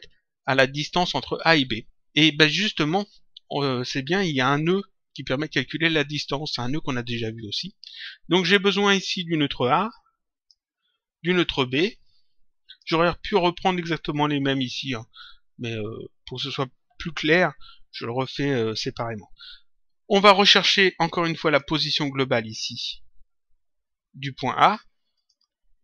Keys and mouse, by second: 9.2 click, 11.6 click, 21.4 click, 25.2 click.